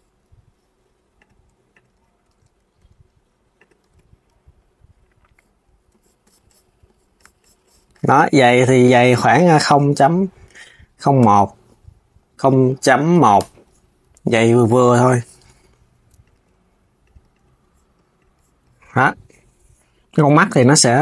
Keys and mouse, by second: 0.9 click, 1.4 click, 1.6 KP_1, 2.5 g, 3.5 KP_3, 8.7-11.7 drag, 12.2-13.7 drag, 13.7 KP_3, 15.9 click, 16.1 g, 17.0 click, 17.9 click.